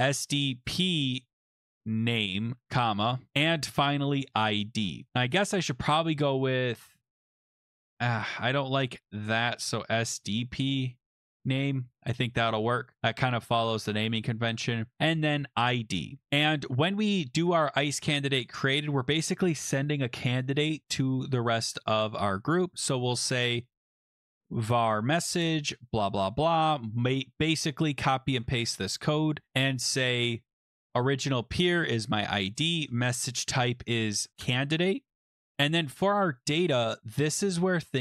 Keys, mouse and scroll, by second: 0.0-4.5 typing, 3.3 click, 4.5 Left, 4.7 Left, 5.0 Left, 5.1 Left, 5.1 Left, 5.3 Left, 5.5 Left, 5.8 Right, 6.0 Left, 6.2 Left, 6.3 Left, 6.7 Right, 7.0 typing, 7.3 Right, 7.8 Left, 9.1 Delete, 9.2 Delete, 9.7-11.8 typing, 12.7 click, 16.2-18.0 scroll down 9, 18.1 click, 18.7 Return, 27.0 click, 27.5 ctrl+c, 28.4 click, 28.5 ctrl+v, 29.5-30.0 scroll down 1, 33.0 click, 33.1 click, 33.7 scroll, 33.8-34.8 typing, 36.6 click, 36.8 click.